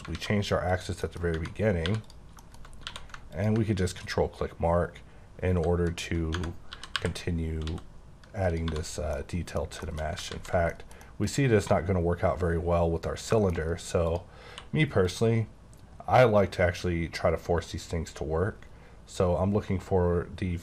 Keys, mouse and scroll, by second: 0.1 alt+a, 0.7 click, 1.1 middle click, 1.3 scroll up 1, 1.4 Tab, 1.8 3, 2.0 click, 2.4 shift+middle click, 2.6 shift+scroll up 2, 2.8 q, 3.3 ctrl+click, 5.9 click, 6.7-7.6 typing, 8.4 click, 8.6 typing, 8.8 scroll down 2, 9.1 middle click, 9.8 middle click, 10.3 ctrl+z, 10.7 middle click, 13.4 shift+middle click, 14.1 click, 14.5 q, 15.1 click, 15.6-17.8 scroll down 10, 17.9-18.5 scroll up 8, 18.5-20.2 scroll down 16, 20.5-20.6 scroll up 2.